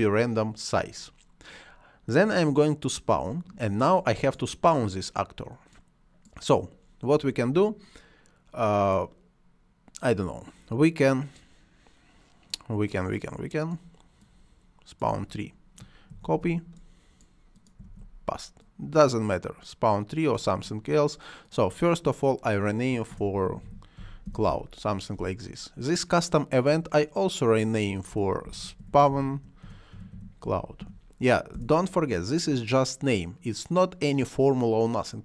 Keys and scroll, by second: 16.0 ctrl+c, 17.8 ctrl+v, 22.8-24.7 typing, 27.8-31.3 typing, 31.5 Return.